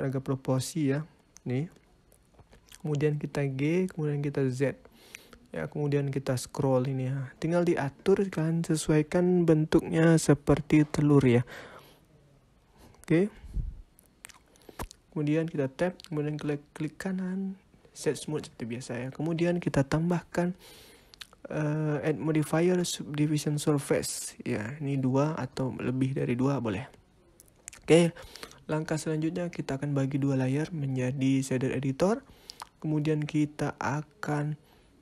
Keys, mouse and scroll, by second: 0.7 click, 1.1 middle click, 2.9 g, 14.6 Tab, 16.6 right click, 18.0 middle click, 20.8 click, 21.3 click, 24.4 click, 25.2 click, 28.0 click, 30.8 click, 33.3 n.